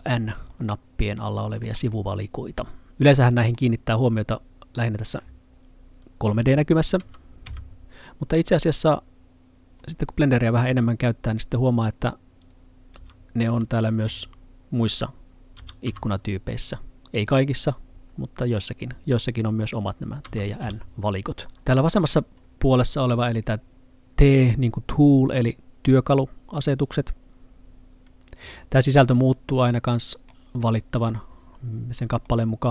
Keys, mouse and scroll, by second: 0.5 middle click, 7.1 t, 7.5 n, 8.9 click, 13.0 n, 13.5 t, 14.1 n, 15.9 t, 20.3 t, 20.7 n, 21.9 click, 29.6 middle click, 31.7-32.3 scroll down 1, 32.3 middle click.